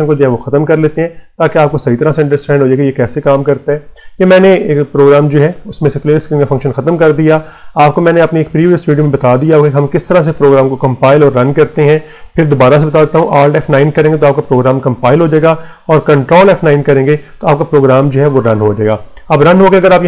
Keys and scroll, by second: 0.4 BackSpace, 13.5 alt+F9, 15.0 Return, 16.2 ctrl+F9.